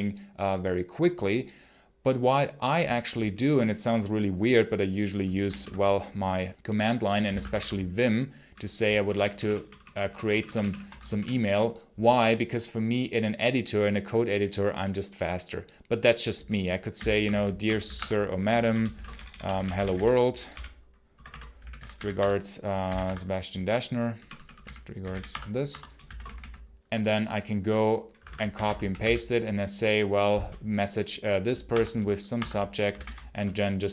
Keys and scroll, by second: 6.4 super+Return, 7.2 v, 7.2 space, 7.4 Return, 8.3 i, 8.8 ctrl+shift+-, 9.0 ctrl+shift+=, 10.8 ctrl+BackSpace, 16.5-22.7 typing, 18.3 Return, 21.0 Return, 22.9 Tab, 24.0 Return, 24.2-26.6 typing, 25.5 Escape, 28.0 space, 28.1 y, 28.5 super+h, 28.8 c, 31.5 Tab, 32.2 Tab, 32.8 ctrl+v.